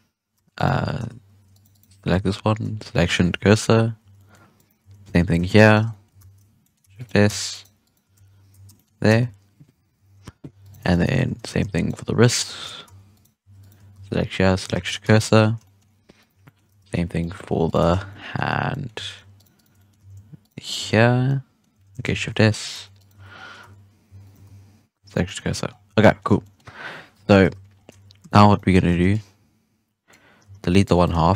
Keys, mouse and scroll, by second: 0.3 Tab, 0.5 right click, 0.7 Tab, 1.1 shift+s, 1.5 right click, 1.7 right click, 2.1 shift+s, 3.3 KP_3, 3.9 Tab, 4.1-4.5 middle drag, 4.5 right click, 4.8 Tab, 5.0 1, 5.3 alt+a, 5.6 alt+shift+right click, 5.8 shift+scroll down 2, 5.8-6.1 middle drag, 6.1 shift+s, 6.5 middle drag, 6.8 Tab, 6.9 right click, 7.2 Tab, 7.5 right click, 7.8 right click, 8.1 shift+s, 8.7-9.0 shift+middle drag, 9.0 Tab, 9.9 KP_1, 10.5 right click, 10.7 Tab, 10.8 middle drag, 11.1 alt+a, 11.3 1, 11.7 alt+shift+right click, 12.4 shift+s, 12.8 Tab, 13.1 right click, 13.4 Tab, 13.5 right click, 13.9 shift+s, 14.8 shift+middle drag, 15.0 Tab, 15.1-15.5 middle drag, 15.5-16.1 scroll up 7, 15.6 shift+middle drag, 16.1 right click, 16.3 Tab, 16.4 middle drag, 16.6 alt+a, 16.9 1, 17.1-17.6 middle drag, 17.6 alt+shift+right click, 17.8 z, 18.0 middle click, 18.4 z, 18.6 middle drag, 18.9 z, 19.3 shift+right click, 19.5 shift+right drag, 19.7 middle drag, 19.9 z, 20.4 shift+right click, 20.5 shift+right click, 20.7 z, 21.2-21.7 middle drag, 21.7 z, 22.0 shift+s, 22.4 middle drag, 22.7 Tab, 22.9 right click, 23.1 Tab, 23.3 scroll down 2, 23.5 Tab, 24.0 Tab, 24.2 right click, 24.4 shift+s, 25.0 scroll down 3, 25.2-25.6 middle drag, 25.6 scroll up 3, 25.8 scroll down 6, 26.0-26.5 middle drag, 26.5-27.1 scroll up 5, 27.1 KP_1, 27.4 alt+a, 27.7 scroll down 2, 27.8 Tab, 28.2 z, 28.5-28.8 shift+middle drag, 28.8 alt+a, 29.0-30.4 drag, 30.4 x, 31.0 shift+middle drag, 31.1-31.3 scroll up 1.